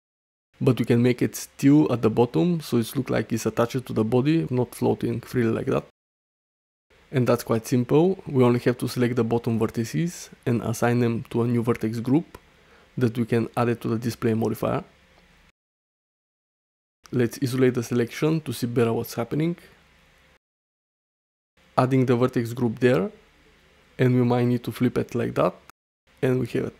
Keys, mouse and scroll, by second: 0.9 space, 1.0 click, 1.3 middle click, 1.4 click, 1.5 middle click, 2.0 Tab, 2.3 alt+z, 2.8 shift+middle click, 3.5 shift+middle click, 3.8 middle click, 4.4 middle click, 4.9 1, 5.1-6.3 drag, 7.7 click, 9.1-10.2 drag, 12.0 click, 12.5 Tab, 13.1 click, 14.5 alt+z, 14.9 shift+middle drag, 15.8 middle click, 16.7 /, 18.5 shift+middle drag, 18.8-19.3 middle drag, 19.6 shift+middle click, 19.9 middle click, 22.0 click, 23.5 middle click, 25.5-26.0 middle drag, 26.3 shift+middle drag, 26.6 middle drag.